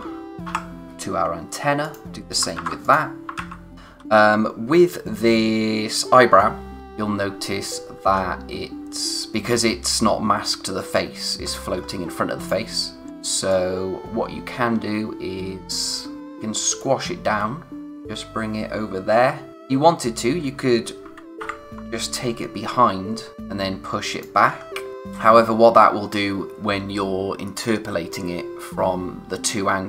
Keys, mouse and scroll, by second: 1.8 click, 2.5 ctrl+c, 2.8 click, 3.7-5.5 scroll up 1, 6.2-6.8 scroll down 1, 6.8-8.0 scroll up 1, 11.4 scroll down 1, 12.4 click, 16.2-16.6 scroll up 1, 16.8 click, 23.3 click, 24.5-24.9 scroll down 1.